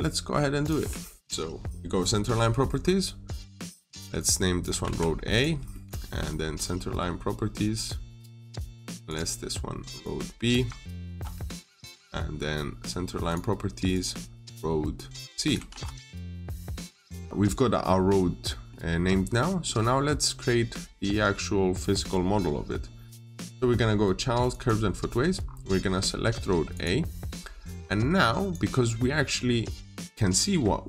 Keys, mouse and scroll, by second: 0.4 click, 1.3-2.4 scroll up 1, 3.2 click, 4.7 a, 5.2 click, 5.4 scroll down 1, 5.6 middle click, 8.1 click, 11.8 click, 16.2 click, 16.8-17.2 scroll down 1, 17.2 middle click, 19.0 scroll down 1, 19.2 middle click, 24.4 click, 25.3 scroll up 1, 26.6 click.